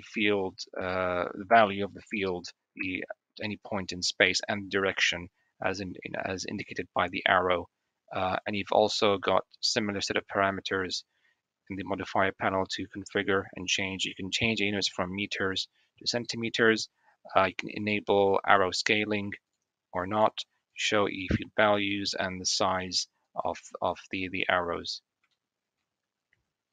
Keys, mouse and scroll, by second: 17.7 click, 18.4 g, 20.6 click, 21.2 click, 21.8 click, 23.2 click, 25.2 shift+middle drag.